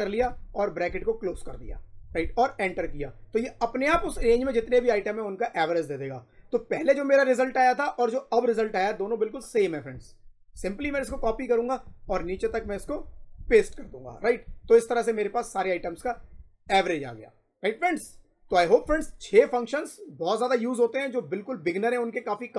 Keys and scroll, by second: 0.8 shift+0, 3.8 Return, 4.3 Up, 10.7 ctrl+c, 11.1 shift+Down, 13.2 ctrl+v, 13.7 Up, 15.7 Left.